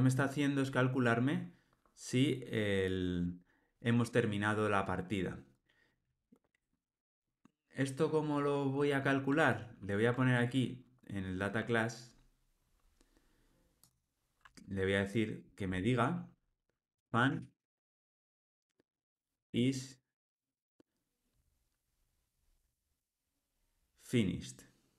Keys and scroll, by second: 1.2 alt+super+[, 9.5 super+b.